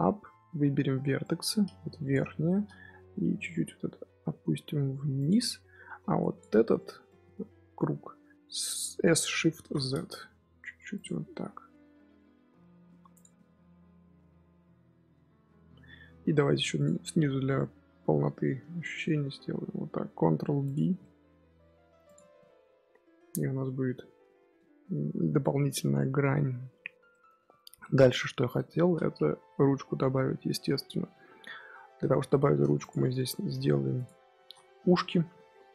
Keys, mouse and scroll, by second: 0.7 1, 1.1 click, 2.3-3.3 shift+middle drag, 3.3 g, 5.7 3, 6.1 alt+click, 6.7 middle click, 7.1 z, 7.7 middle click, 8.3 s, 11.5 2, 12.7 Tab, 12.9-13.3 scroll down 6, 13.0 click, 13.3-14.4 middle drag, 14.4-16.0 scroll up 6, 15.3-15.7 middle drag, 16.0-16.4 middle drag, 16.4 Tab, 16.5 3, 16.7 click, 17.5 scroll down 1, 17.6-18.5 scroll up 1, 18.5 ctrl+b, 20.7 Tab, 20.9-22.0 middle drag, 22.0 click, 22.2 scroll up 1, 22.4-23.2 middle drag, 23.2 scroll down 1, 23.3 scroll up 1, 23.4 scroll down 3, 23.6 middle drag, 23.8 scroll up 1, 23.9-24.3 scroll down 1, 24.3-24.6 shift+middle drag, 24.6 scroll up 1, 24.7-26.8 scroll down 1, 26.8 scroll down 1, 27.0-29.3 middle drag, 29.3 KP_1, 31.5-32.2 scroll up 5, 32.2-32.7 shift+middle drag, 32.7 click, 32.9-33.4 middle drag, 33.4 Tab, 33.6 2, 33.9 click, 34.3 shift+s, 34.7 Tab, 34.8 scroll down 1, 34.9-35.5 middle drag, 35.5 KP_3.